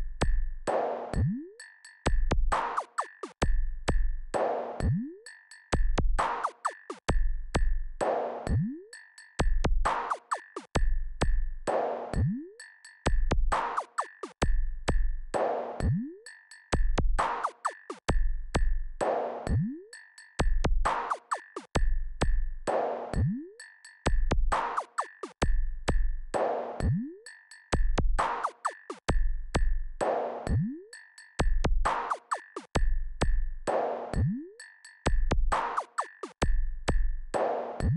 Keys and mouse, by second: 0.0 click, 4.3-5.7 drag, 7.0 KP_0, 8.8 n, 10.0 KP_4, 11.0 KP_4, 12.5 click, 17.3-18.7 drag, 19.8 KP_8, 21.1-21.8 KP_6, 24.1 click, 31.4-32.9 drag, 35.9-36.5 KP_4, 37.6 click.